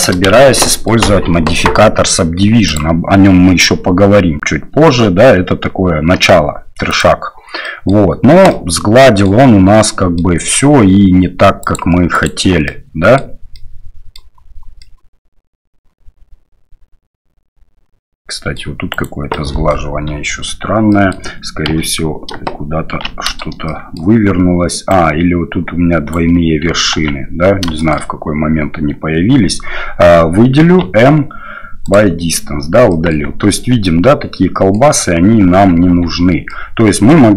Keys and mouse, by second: 0.2 shift+z, 0.6 click, 2.7-7.0 drag, 7.6 middle drag, 8.4-9.2 middle drag, 9.7-10.2 middle drag, 11.6 click, 12.6-13.1 middle drag, 13.5-14.1 middle drag, 14.8-18.5 middle drag, 18.9 right click, 19.3-19.7 middle drag, 20.3 Tab, 20.9 middle click, 21.6 a, 23.1 shift+n, 23.6 middle click, 24.9-26.1 right drag, 26.9 ctrl+z, 27.7 shift+middle click, 29.3 a, 30.8 m, 32.9 click, 33.2 Tab, 33.8 click, 35.0 Tab, 35.9 Tab, 36.5 click.